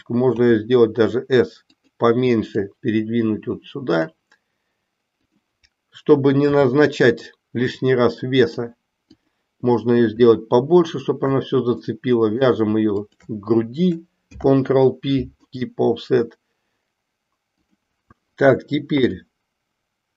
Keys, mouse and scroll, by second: 0.4 s, 2.6-4.1 drag, 5.2 click, 6.5 g, 9.0 click, 11.8 middle click, 13.0 shift+click, 14.2 ctrl+p, 17.6 click.